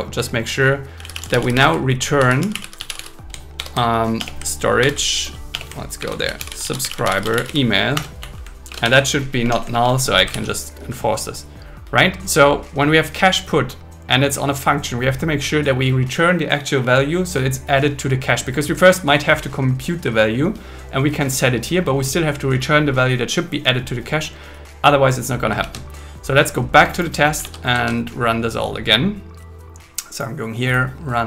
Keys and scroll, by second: 1.5 space, 3.6 alt+6, 4.2 BackSpace, 4.8 alt+6, 5.5 BackSpace, 6.0 alt+5, 7.9 Return, 8.2 Right, 8.7 shift+Up, 8.9 shift+1, 9.4 BackSpace, 9.7 shift+1, 10.3 super+s, 25.6 super+1, 27.5 super+1.